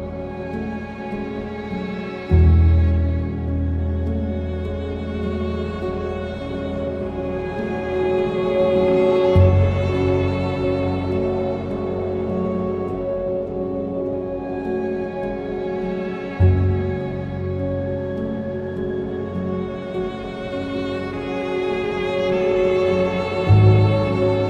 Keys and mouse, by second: 4.1 click, 4.7 Tab, 5.2 Tab, 6.6 click, 7.5 ctrl+a, 10.7 ctrl+j, 15.3 click, 15.6 Tab, 17.3 alt+z, 17.7 click, 18.8 ctrl+KP_Add, 19.0 ctrl+KP_Add, 19.2 z, 19.7 alt+z, 20.2 alt+z, 21.2 shift+d, 21.5 Escape, 22.1 g, 22.3 y, 23.3 KP_7.